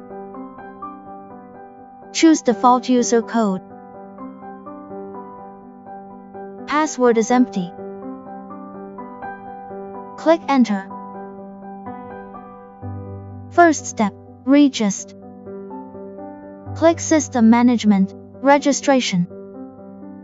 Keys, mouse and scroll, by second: 0.0 click, 3.6 click, 5.2 click, 13.3 click, 17.3 click.